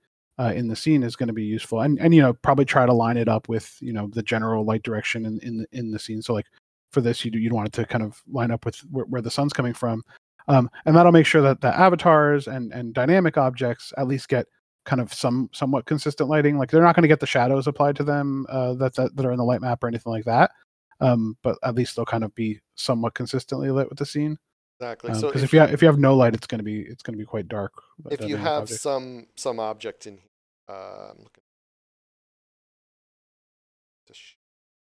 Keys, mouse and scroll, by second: 2.5 click, 9.8 scroll down 1, 10.4 click, 15.9 click, 17.1 scroll up 1, 18.2 click, 21.0 click, 22.5 scroll down 1, 23.4 scroll up 1, 24.2 scroll down 1, 29.5 scroll down 1.